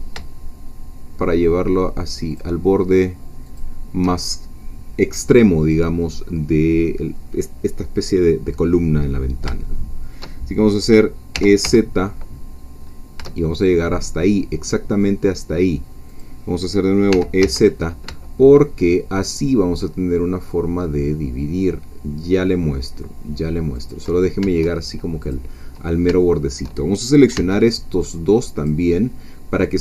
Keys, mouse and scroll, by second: 2.3 shift+click, 3.6 shift+click, 9.2 middle click, 9.2 scroll down 2, 9.7 shift+middle click, 10.7-11.4 scroll up 2, 11.4-12.2 scroll up 1, 11.4 e, 11.6 z, 12.2-13.2 scroll up 1, 13.2-13.7 shift+scroll up 1, 13.7-15.2 scroll up 1, 16.1 click, 17.1 e, 17.4 z, 23.8 shift+click, 25.2 click, 25.8-26.1 scroll up 1, 26.2 shift+middle click, 27.3 b, 28.0 click.